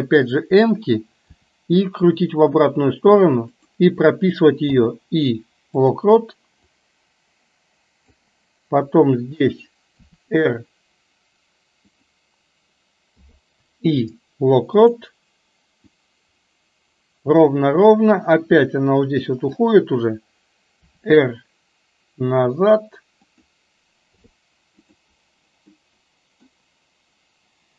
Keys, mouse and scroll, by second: 1.4 r, 4.7 i, 6.8-8.3 drag, 9.9 r, 13.1 i, 15.9-19.7 drag, 20.8 r, 24.2 i, 25.8 middle click.